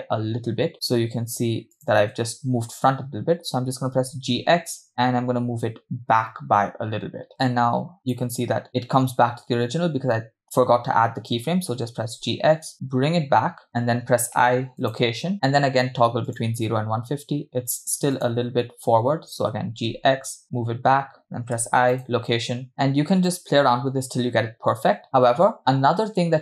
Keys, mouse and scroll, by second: 0.7 click, 2.1 click, 3.9 g, 7.3-8.7 click, 8.4 click, 11.8 g, 14.4 i, 16.5 click, 18.4 click, 19.8 g, 21.6 i, 22.7 click, 23.5 click.